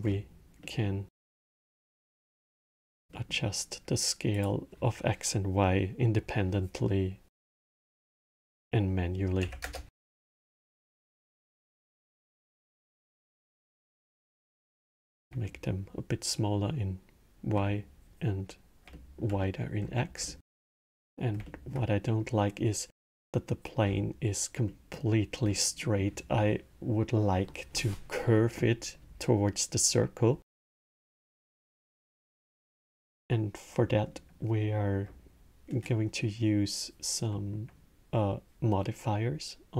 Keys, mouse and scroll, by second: 0.3-1.8 middle drag, 1.8 drag, 2.4-4.1 middle drag, 4.1-7.3 drag, 10.6-13.2 alt+middle drag, 13.2-15.2 drag, 15.2-18.4 alt+middle drag, 18.6-19.5 alt+middle drag, 19.5 scroll, 20.0-23.6 alt+middle drag, 23.6 scroll, 24.4-25.1 middle drag, 25.1 scroll, 25.5-28.6 middle drag, 30.6-32.0 middle drag, 32.0 scroll, 33.6-36.6 middle drag, 37.0-39.7 middle drag.